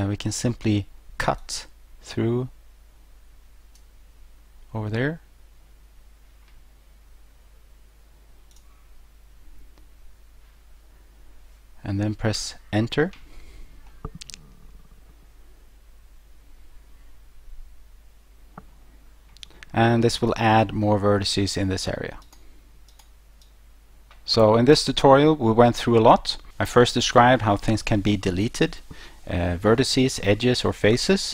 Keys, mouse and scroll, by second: 1.4 click, 8.5 click, 12.4 Return, 13.9 middle click, 20.3 click, 21.1 middle click, 22.3 right click, 22.9 right click, 23.5 right click.